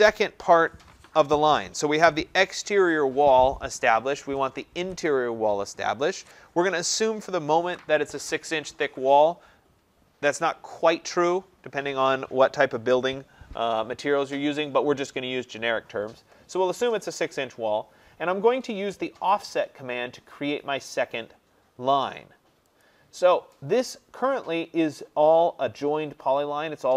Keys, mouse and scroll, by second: 22.9-26.9 drag.